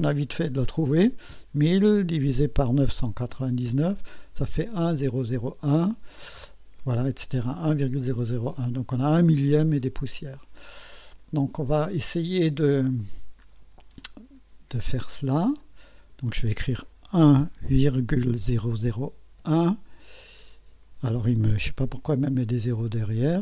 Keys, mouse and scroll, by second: 0.4 1, 0.8 0, 2.3 /, 2.8 9, 3.7 Return, 13.0 click, 15.1 click, 15.6 click, 17.2 1, 18.0 ,, 18.4 0, 19.4 1, 22.6 Delete.